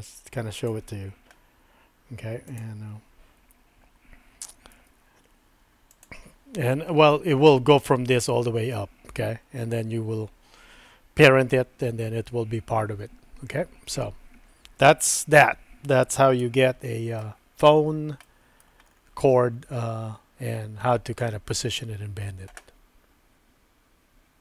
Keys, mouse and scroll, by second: 1.0 Tab, 2.5 click, 4.7 g, 16.5 shift+middle click, 18.3 scroll up 1, 18.5 middle click.